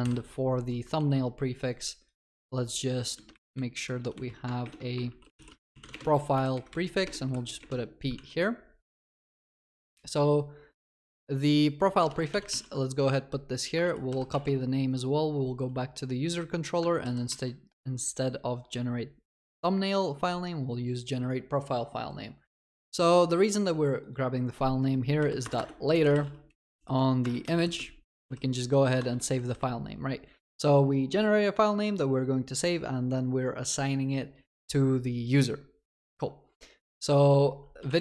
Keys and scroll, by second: 0.0 ctrl+b, 0.9 ctrl+d, 4.6 ctrl+BackSpace, 9.2 ctrl+w, 9.7 ctrl+c, 12.0 ctrl+c, 12.1 ctrl+w, 12.3 ctrl+v, 12.6 ctrl+s, 13.8 ctrl+s, 13.8 ctrl+w, 14.3 ctrl+c, 14.4 ctrl+s, 17.0 ctrl+w, 17.3 ctrl+v, 27.3 Return.